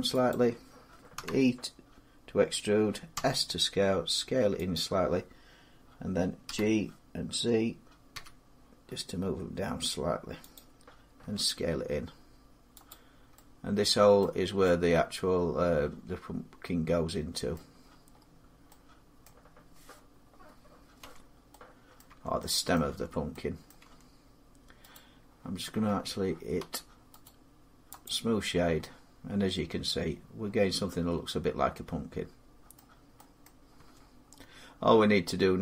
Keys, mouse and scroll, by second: 0.1 click, 0.9 e, 2.9 s, 4.5 click, 6.2 g, 7.9 z, 10.3 click, 11.0 s, 12.7 click, 13.1 middle click, 14.0 middle click, 14.2 middle click, 15.5 scroll down 4, 16.9-17.7 scroll, 17.9 middle click, 18.0 scroll down 2, 19.0 middle click, 20.8 Tab, 21.8 middle click, 21.9 Tab, 22.5 middle click, 23.1 Tab, 23.5 middle click, 24.6 Tab, 24.7 right click, 25.6 Tab, 26.4 Tab, 27.0 right click, 27.8 click, 28.3-28.6 scroll, 31.3 scroll down 4, 32.5 middle click, 33.2 middle click, 33.6 Tab, 34.0-35.6 scroll up 4.